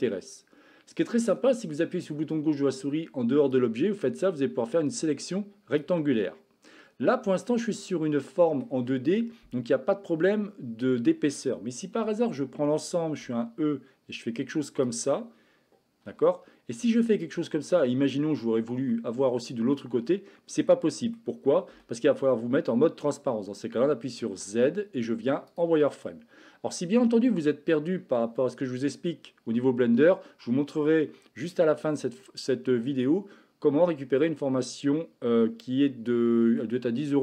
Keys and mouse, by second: 3.4-5.8 drag, 7.2-8.7 middle drag, 11.9 a, 12.3 a, 13.2 e, 16.1 a, 17.5 click, 18.9-21.2 middle drag, 21.6 a, 24.3 z, 26.8-27.9 middle drag, 34.9-36.6 middle drag.